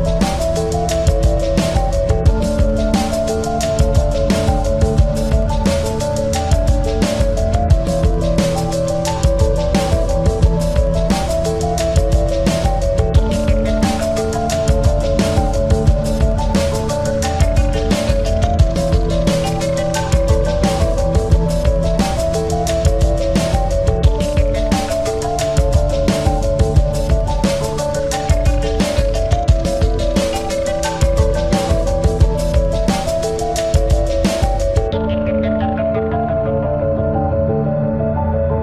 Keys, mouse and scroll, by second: 0.5 Tab, 2.9 click, 4.6-5.6 drag, 5.0 ctrl+z, 6.0 s, 8.2-9.8 drag, 9.2 Tab, 13.6 middle click, 14.5-25.2 drag, 28.9-37.3 drag, 38.2-38.6 drag.